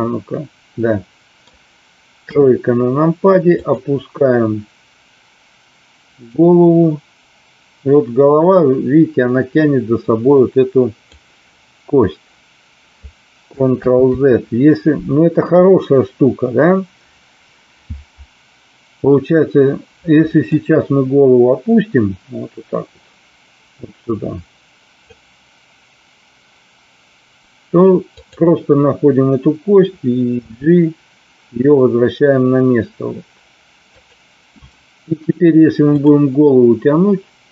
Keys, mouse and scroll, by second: 2.2 KP_3, 3.5 click, 6.4-11.1 drag, 14.0 ctrl+z, 20.5-25.0 drag, 28.1 click, 30.4 g, 33.8 click, 36.0 click.